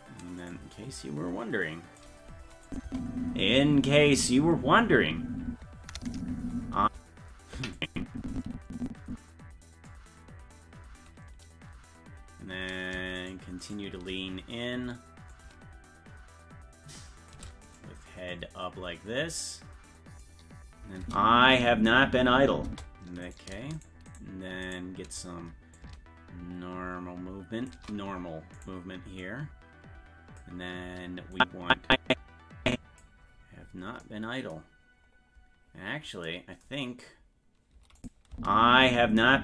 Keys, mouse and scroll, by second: 0.5 right click, 1.0-2.0 drag, 2.7 click, 2.9 space, 7.8-9.9 drag, 7.8 space, 13.3 shift+right click, 14.1 shift+right click, 15.3-17.3 shift+drag, 17.7 right click, 18.3-20.2 drag, 21.0 space, 23.4 right click, 23.4 space, 23.8 shift+right click, 25.8-27.7 shift+drag, 28.7 right click, 29.2-30.4 drag, 31.4-33.0 drag, 33.3-35.0 scroll up 12, 35.0-35.5 scroll up 1, 35.9-36.2 scroll up 1, 38.0 click, 38.3 space.